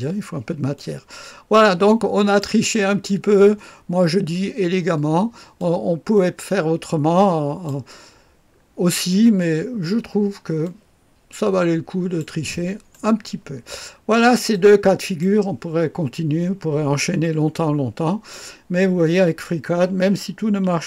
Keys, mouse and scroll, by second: 0.7-2.3 drag, 3.0-3.5 scroll down 1, 3.5 middle click, 4.9 middle click, 5.5-7.6 drag, 8.4-10.0 scroll down 2, 10.0-10.5 scroll down 1, 10.5-13.1 drag, 13.9-14.4 scroll down 2, 14.4-15.5 drag, 16.9-18.3 drag.